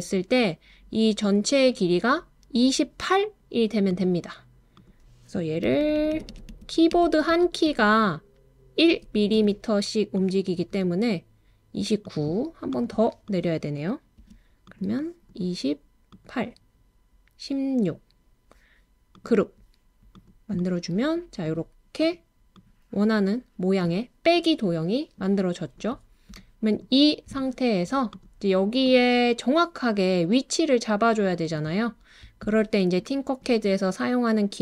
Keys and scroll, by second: 5.6 Page_Down, 5.8 Page_Down, 6.0 Page_Down, 6.1 Page_Down, 6.3 Page_Down, 8.9 Page_Up, 9.4 Page_Up, 14.2 Page_Down.